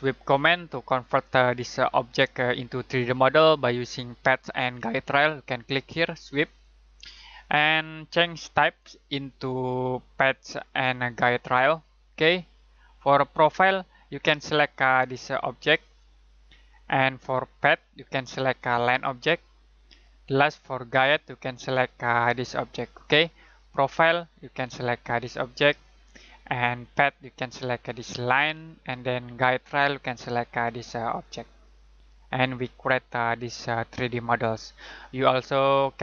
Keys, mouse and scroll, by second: 0.2 middle click, 6.4 click, 11.3 click, 15.8 click, 24.0 click.